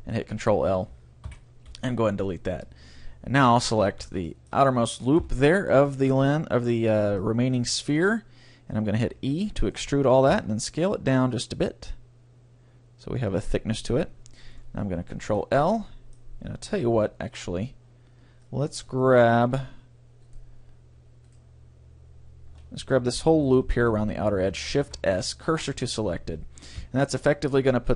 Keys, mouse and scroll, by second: 1.3 Delete, 3.6-5.4 right drag, 4.3-5.4 drag, 5.2 KP_3, 5.4 middle click, 8.4 middle click, 8.7 middle click, 9.2 e, 9.7-11.6 right drag, 10.3 s, 13.3-15.1 drag, 15.3 ctrl+l, 15.7 middle click, 17.0 KP_1, 17.6 middle click, 18.5-20.7 middle drag, 18.7 ctrl+l, 20.3 right click, 21.3-25.3 right drag, 24.8 shift+s, 26.8 KP_3.